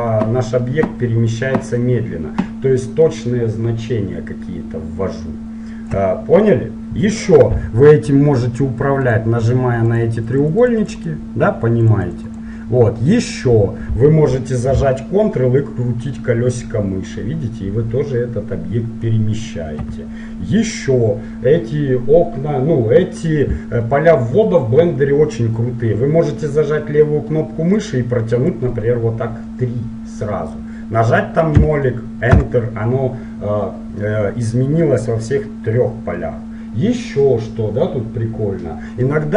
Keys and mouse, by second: 9.1-14.0 drag, 14.0-21.5 middle drag, 27.7-29.6 drag, 39.2-39.3 middle drag.